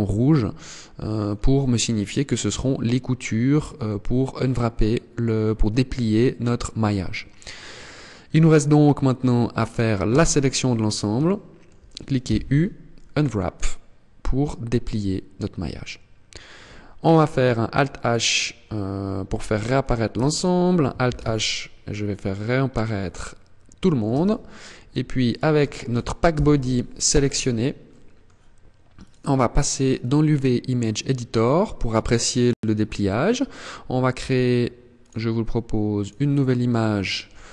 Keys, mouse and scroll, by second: 0.8-1.2 scroll down 3, 1.4 middle click, 8.2-8.6 scroll up 2, 9.5 a, 10.1 scroll down 1, 10.7 shift+middle click, 11.7 u, 15.3-15.9 scroll down 2, 16.0 scroll up 1, 18.7 alt+h, 19.6 Tab, 20.5 alt+h, 21.1-21.5 scroll down 4, 21.7-22.1 scroll up 4, 22.3 middle click, 23.6 Tab, 24.7 right click, 25.8 ctrl+l, 26.8 scroll down 1, 27.3 middle click, 28.4 click.